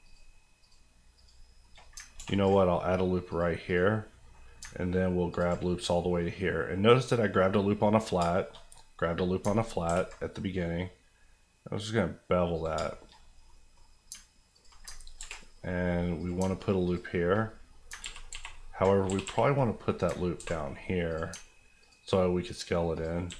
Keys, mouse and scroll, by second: 0.0 shift+click, 1.1 shift+click, 1.6 shift+middle click, 1.8 middle click, 2.0 ctrl+middle click, 2.1 ctrl+r, 2.4 click, 4.0 middle click, 4.4-5.3 scroll down 2, 5.3 ctrl+click, 5.6 click, 6.0 middle click, 8.1 shift+middle click, 8.6 middle click, 9.5 ctrl+middle click, 9.8 ctrl+b, 11.1-11.5 scroll down 1, 11.8-12.5 scroll up 1, 12.5 click, 12.7 shift+click, 12.9 shift+middle click, 13.2 middle click, 14.0 alt+middle click, 14.5 alt+click, 14.8 click, 14.9 ctrl+click, 15.2 ctrl+b, 16.2 click, 16.3 alt+click, 17.9 ctrl+click, 18.0 ctrl+z, 19.0 g, 19.2 g, 19.9 click, 20.1 ctrl+click, 20.3 ctrl+b, 21.1 click, 21.3 alt+click, 22.9 alt+click, 23.2 alt+s.